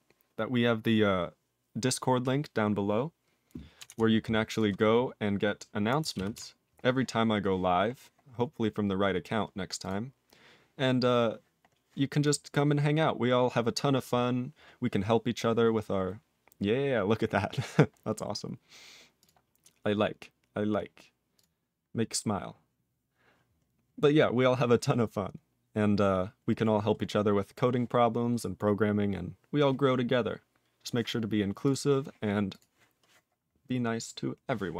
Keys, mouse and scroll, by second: 31.7 ctrl+s, 32.5 click, 32.6 click.